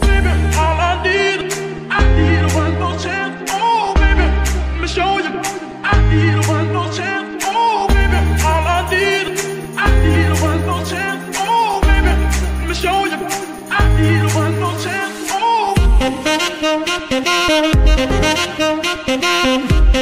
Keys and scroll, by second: 4.4 KP_1, 5.5 g, 5.8 x, 8.9 KP_3.